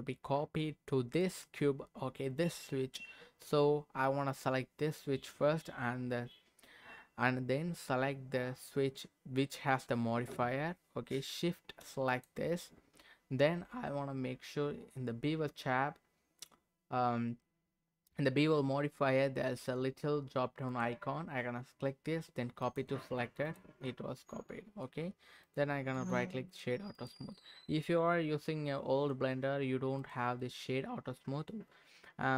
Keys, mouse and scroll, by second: 1.2 click, 12.1 shift+click, 20.7-22.8 drag, 23.4 click, 23.8-24.9 middle drag, 25.4 click, 25.9 right click, 26.9 click, 27.3-28.4 middle drag, 28.6 middle click, 30.0 click, 30.4-32.3 right drag.